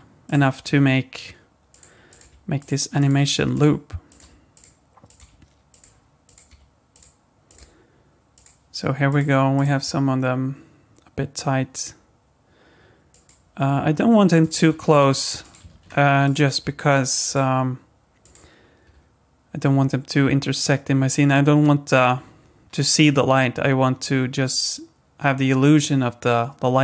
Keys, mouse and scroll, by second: 0.2 click, 0.7 g, 2.1 click, 2.2 g, 3.0 click, 3.1 g, 4.1 click, 4.2 g, 5.1 click, 5.2 g, 6.2 click, 6.5 g, 7.5 click, 7.6 g, 9.1 click, 9.5 click, 9.8 g, 14.4 click, 14.7 g, 15.7 ctrl+z, 16.2 click, 16.5 g, 18.2 click, 18.8 g.